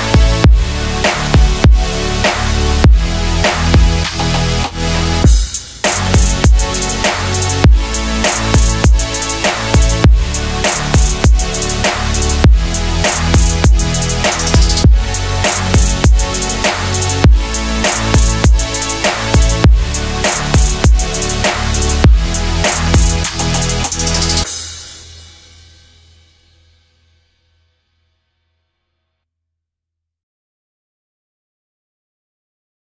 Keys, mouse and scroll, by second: 0.8 click, 1.1 middle click, 1.3 click, 1.6 middle click, 7.6 click, 8.0-9.7 typing, 8.7 click, 9.9 click, 10.8-14.3 typing, 11.9 ctrl+middle click, 12.8 shift+middle click, 13.3 click, 13.7 ctrl+middle click, 14.8 ctrl+r, 14.9 click, 15.0 right click, 15.1 click, 15.3-16.8 typing, 15.5 click, 15.6 double click, 15.8 click, 16.0 click, 16.1 click, 16.2 click, 16.6 click, 16.8 click, 17.0 click, 17.3 ctrl+middle click, 17.8 shift+middle click, 18.5 middle click, 18.6 click, 18.8 middle click, 19.0 middle click, 19.1 middle click, 19.3 click, 19.6 click, 19.6 middle click, 20.8 click, 21.2 middle click, 21.6 click, 21.8 double click, 21.9 click, 22.3 middle click, 22.6 click, 22.9 double click, 23.1 click, 23.2 double click.